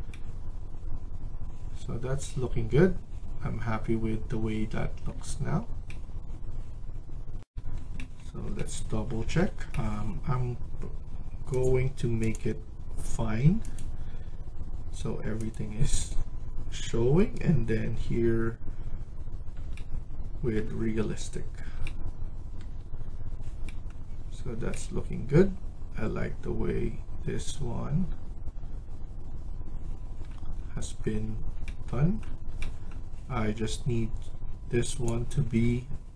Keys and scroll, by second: 7.3 F1.